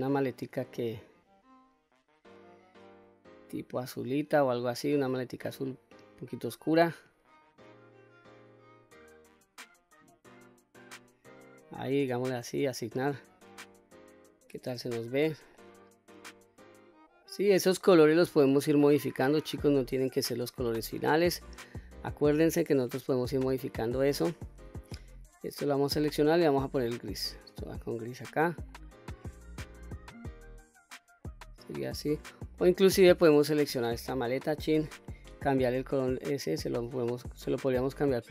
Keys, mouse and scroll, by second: 12.8 click, 13.8 click, 15.0 Tab, 15.6-18.1 middle drag, 18.5-19.5 middle drag, 19.8 scroll up 2, 21.1 click, 22.6 Tab, 23.4 click, 24.7 l, 27.0 click, 27.6 click, 28.3-28.9 scroll down 2, 28.8 click, 29.3-30.9 middle drag, 31.3-32.6 middle drag, 33.1 click, 34.5 l, 36.7 click.